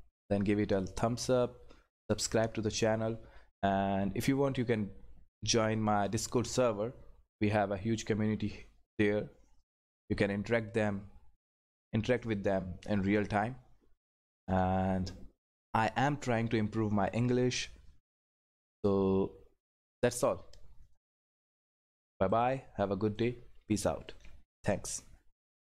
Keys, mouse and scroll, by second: 22.3 click.